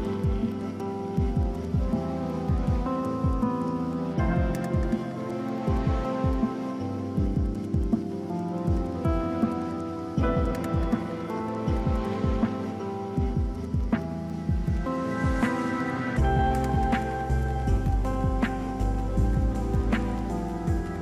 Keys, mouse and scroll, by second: 0.7 ctrl+click, 4.0 ctrl+t, 5.0 alt+click, 13.5 Right, 13.8 Up, 14.1 Right, 14.2 Up, 14.5 Up.